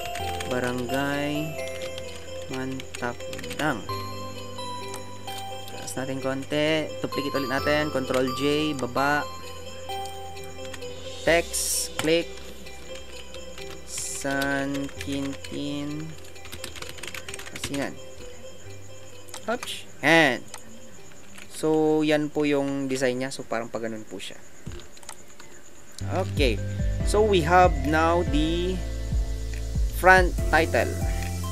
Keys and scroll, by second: 0.0-4.0 typing, 5.5 Up, 10.8 t.